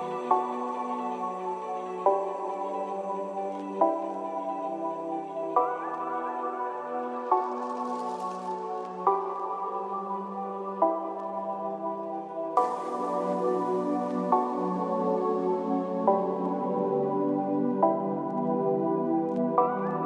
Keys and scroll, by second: 2.8 ctrl+a.